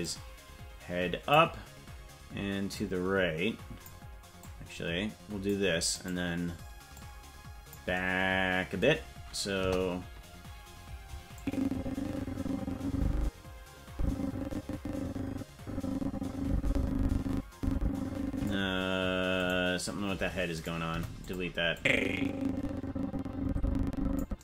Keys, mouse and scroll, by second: 0.0-1.3 drag, 2.7-3.9 drag, 4.4-5.5 drag, 6.0 right click, 6.9 click, 9.5 KP_0, 11.3-18.5 drag, 19.4-20.6 right drag, 20.8 Delete, 21.7-24.2 drag.